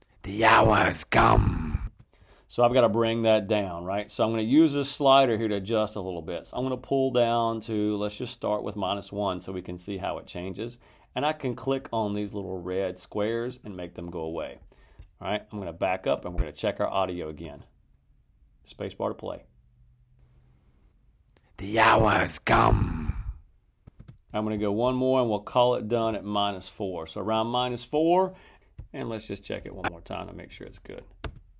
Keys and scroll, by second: 1.8 space, 17.3 space, 23.8 space, 23.9 space, 31.1 space.